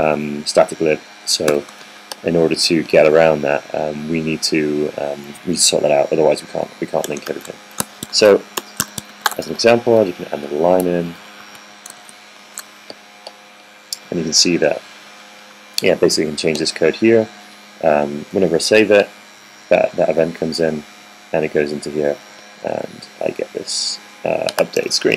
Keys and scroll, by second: 2.4 0, 2.5 0, 2.8 super+s, 5.5 typing, 9.0 super+c, 9.3 Right, 9.5 Return, 10.0 super+v, 11.3-13.2 typing, 11.7 Left, 12.0 Left, 12.8 super+s.